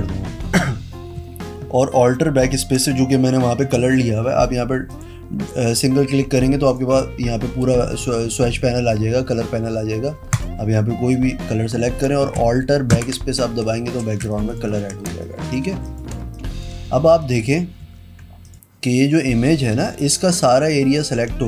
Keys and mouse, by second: 5.0 click, 6.5 click, 7.1 click, 10.5 click, 13.1 alt+BackSpace, 13.9 space, 14.2 z, 14.8 click, 15.3-18.0 typing, 15.3 click, 16.0 click, 16.5 click, 17.4 click, 20.4 space, 21.1 click.